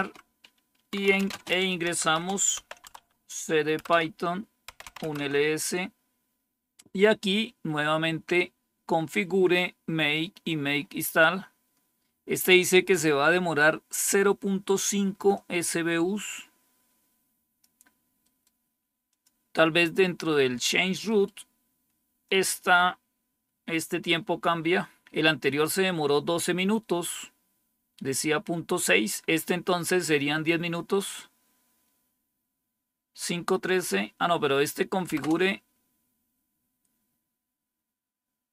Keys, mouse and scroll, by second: 0.0-2.6 typing, 2.9 Tab, 3.8 Return, 4.4-5.2 typing, 7.3-8.2 scroll down 1, 8.2-8.8 scroll up 1, 8.8 scroll up 1, 8.9-9.7 scroll down 1, 9.7-10.6 scroll down 1, 9.8-10.5 typing, 10.6-13.6 scroll up 1, 15.2-17.5 drag, 18.1 right click, 19.0 click, 20.9 right click, 22.1-23.1 drag, 35.1 Return.